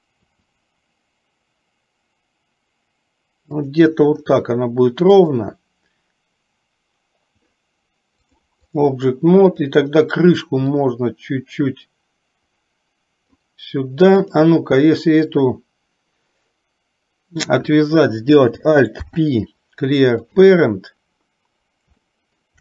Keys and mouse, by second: 0.2 r, 5.1 click, 8.5 click, 9.6 click, 10.7 click, 11.1-13.5 drag, 14.2 click, 19.1 alt+p, 22.1 shift+middle click.